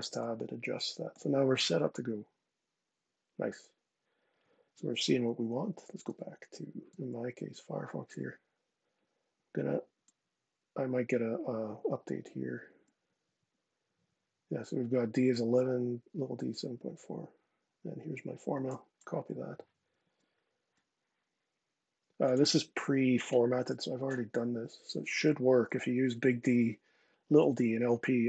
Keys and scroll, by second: 5.7 super+Tab, 6.6 super+Tab, 18.2 super+c, 19.7 super+Tab, 23.3 super+v.